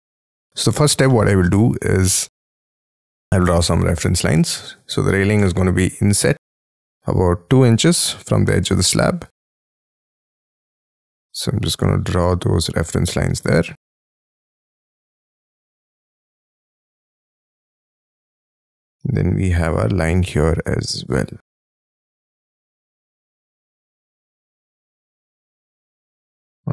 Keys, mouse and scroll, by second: 0.3-1.1 scroll up 13, 1.1 middle click, 1.9 t, 2.3-4.6 scroll up 5, 4.6 2, 5.1 shift+', 5.3 Return, 6.3 scroll up 1, 6.5 ctrl+z, 8.3 2, 9.5 shift+', 9.7 Return, 10.7 scroll up 5, 11.0 middle click, 11.3-12.8 scroll down 32, 12.8-13.8 scroll up 16, 15.3 2, 15.8 shift+', 16.1 Return, 16.7 scroll down 6, 17.0 scroll up 1, 17.1 middle click, 17.8-18.5 scroll up 15, 18.7 shift+middle click, 18.9 shift+space, 19.5 l, 20.6 Escape, 21.5 Escape, 22.3 Escape, 23.8 shift+click, 24.0-26.3 typing, 25.8 Return.